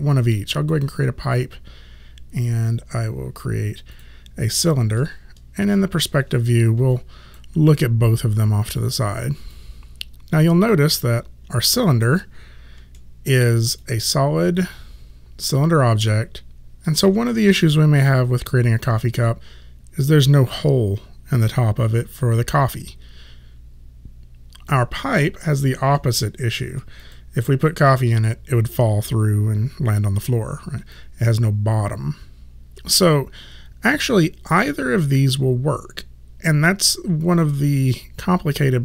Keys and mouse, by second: 0.8 click, 4.0 click, 4.9 space, 7.0 alt+click, 12.1 space, 13.0 alt+middle click, 13.9 alt+click, 24.7 alt+click, 26.0 alt+middle click, 27.0 click, 31.0 alt+click.